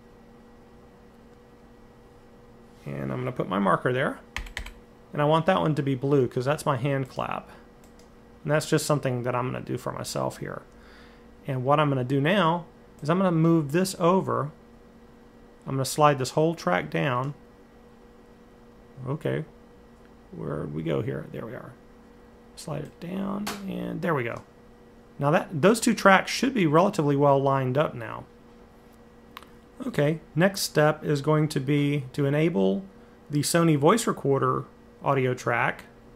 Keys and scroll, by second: 4.1 m, 4.4 m, 6.9 typing.